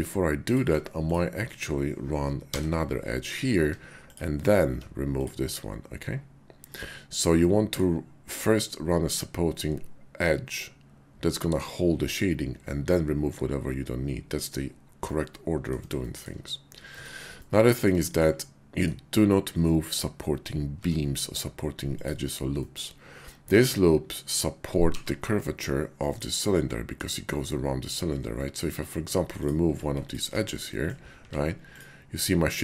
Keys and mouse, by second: 2.3 j, 3.6 Tab, 4.5 x, 7.4 click, 15.0 click, 16.0 shift+click, 16.9 Tab, 17.4 click, 18.4 click, 20.8 Tab, 21.8 click, 22.6-24.2 middle drag, 24.7 g, 26.1 click, 26.5 middle click, 28.4 middle click, 29.3 alt+click, 30.7 middle click, 31.1 x.